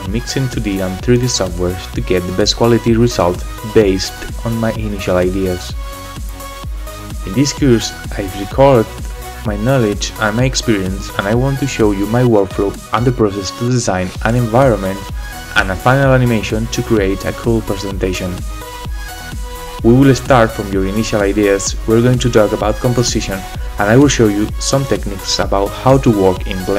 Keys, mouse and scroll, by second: 0.1 middle click, 0.5 click, 1.1 middle click, 1.2 middle click, 1.3 scroll down 1, 1.3 middle click, 1.7 shift+middle click, 1.8 scroll down 2, 1.8 scroll up 1, 2.0 shift+middle click, 2.3 shift+middle click, 2.4 click, 2.9 middle click, 3.1 shift+middle click, 3.3 middle click, 3.3 shift+click, 3.6 shift+middle click, 4.1 shift+click, 4.1 shift+middle click, 4.8 click, 6.3 click, 6.3 middle click, 6.6 click, 6.7 shift+a, 7.7 click, 8.7 ctrl+middle click, 8.8-9.2 scroll up 3, 8.9 shift+middle click, 9.3 click, 9.8 click, 9.9 shift+middle click.